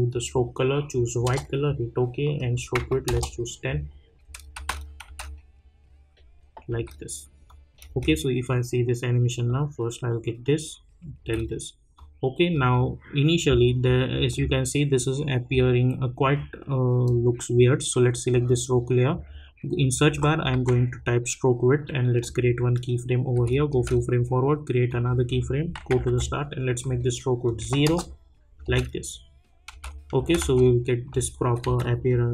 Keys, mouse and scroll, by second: 4.1 Return, 4.2 space, 4.7 click, 5.0 space, 7.5 click, 7.9 space, 11.2 space, 11.9 click, 12.7 click, 17.0 click, 20.1 s, 20.5 t, 22.2 click, 23.3 space, 24.9 click, 25.9 j, 26.0 j, 27.4 click, 27.8 Return, 28.6 space, 30.6 click, 31.6 F9, 31.8 click.